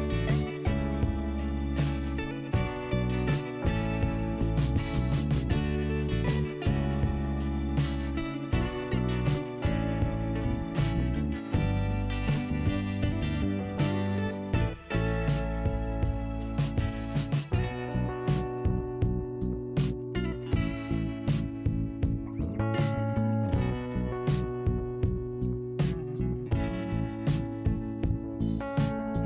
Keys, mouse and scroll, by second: 1.2 click, 2.3 click, 4.1 scroll down 1, 4.6 scroll up 2, 5.2 click, 6.5 scroll down 2, 8.0 click, 8.5-9.5 scroll down 2, 9.5 click, 10.3 scroll down 1, 11.1 scroll up 1, 11.9 click, 13.9 click, 14.1 click, 14.2 click, 15.1 click, 16.1 click, 17.5 click, 18.8 click, 19.6 click, 20.9 click, 22.5 click, 23.9 click, 28.4 click.